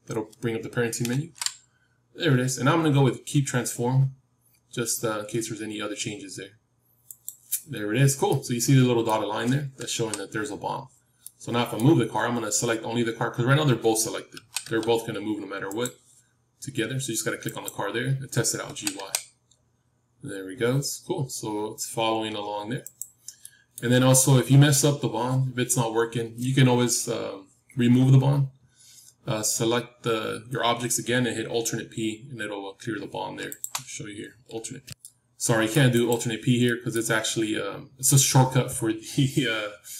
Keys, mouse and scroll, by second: 1.0 ctrl+p, 8.2-10.7 middle drag, 9.8 KP_7, 11.1-13.2 middle drag, 14.3 g, 17.3-19.5 drag, 18.6 g, 23.3-25.4 middle drag, 25.4-25.8 scroll up 1, 33.5-34.9 drag, 35.2-37.2 middle drag, 35.9-39.6 drag.